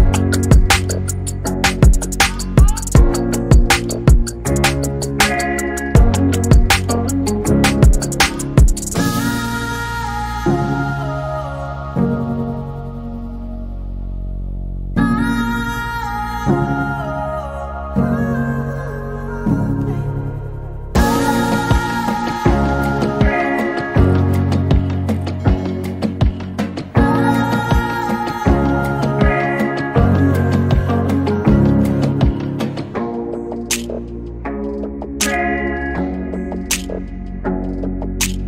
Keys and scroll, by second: 35.1-37.8 typing, 37.9 Return.